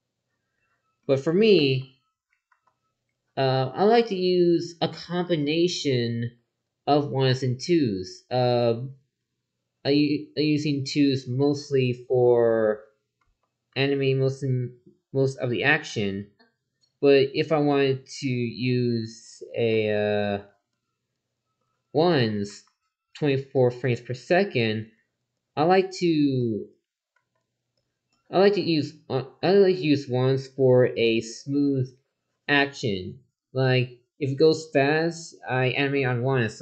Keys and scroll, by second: 1.6 ctrl+z, 13.2 ctrl+z, 19.7 ctrl+z, 22.5 ctrl+z, 26.4 ctrl+z.